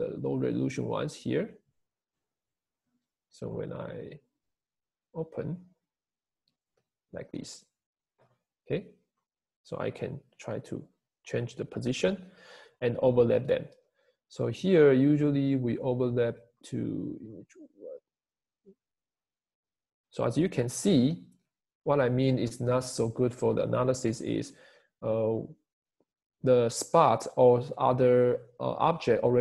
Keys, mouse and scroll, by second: 8.9-29.4 Escape.